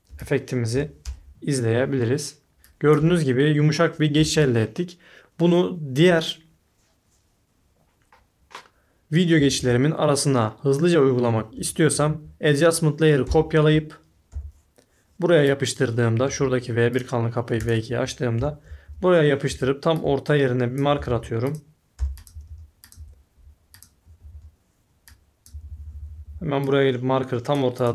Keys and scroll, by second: 0.1 i, 0.7 o, 1.0 Return, 2.6-3.0 typing, 4.1 space, 9.4 typing, 11.7-12.4 typing, 14.3 t, 18.3 y, 18.8 s, 19.4 a, 20.9-22.9 typing, 24.0-26.7 typing.